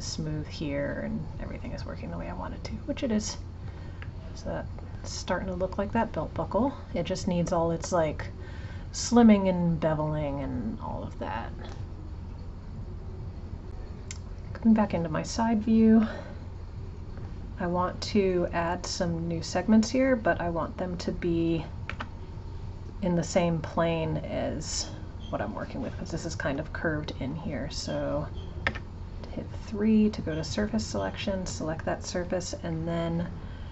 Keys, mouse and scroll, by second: 4.1-7.1 middle drag, 10.9 click, 14.4 click, 16.1 shift+middle click, 16.4-17.2 scroll up 4, 17.2 shift+middle click, 17.7-18.7 alt+drag, 20.6 click, 30.6 click.